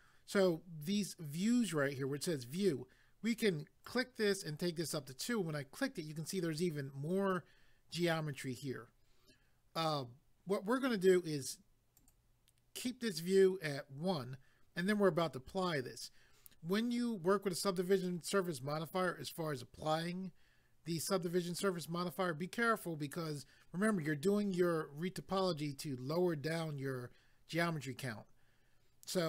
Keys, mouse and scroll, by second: 3.8 click, 12.0 click.